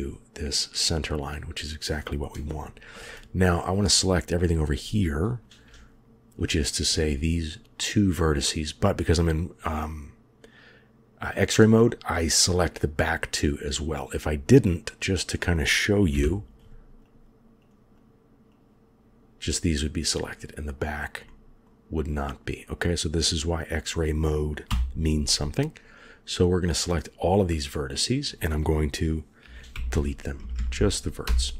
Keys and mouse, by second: 2.4 shift+click, 3.8 click, 7.7 click, 11.7 middle click, 14.8 click, 16.0 KP_1, 18.4-19.1 drag, 19.4 middle click, 21.1 middle click, 23.4-24.6 drag, 24.6 KP_1, 25.9 click, 27.2 click, 27.6-28.1 middle drag, 29.6 Delete, 30.4 Up.